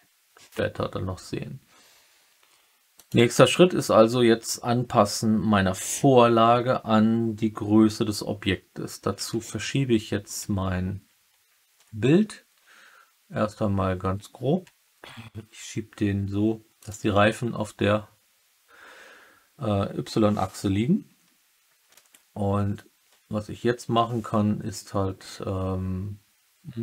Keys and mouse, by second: 2.9 click, 9.1 g, 13.8 middle click, 16.7 click.